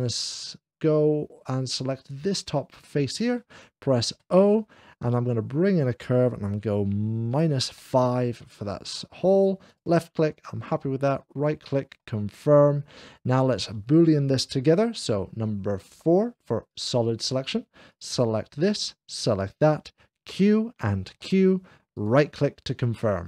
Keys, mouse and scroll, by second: 1.9 click, 4.0 o, 5.0 o, 7.2 -, 7.5 o, 7.8 5, 9.5 click, 10.9-11.9 right drag, 11.9-12.9 middle drag, 16.0 o, 16.0 -, 16.0 5, 16.0 4, 16.5 click, 17.8 click, 19.0 shift+click, 20.4 q, 21.1 4, 21.8 click, 22.2 right click.